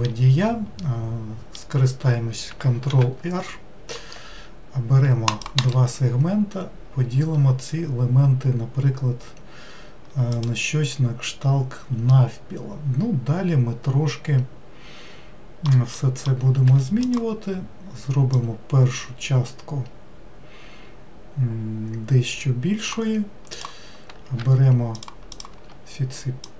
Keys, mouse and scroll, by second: 2.9 ctrl+r, 10.3 click, 12.1-15.1 middle drag, 16.0 middle click, 16.7 3, 17.0 click, 18.3 click, 23.5 click, 24.9 shift+click, 25.3 shift+click, 26.4 click.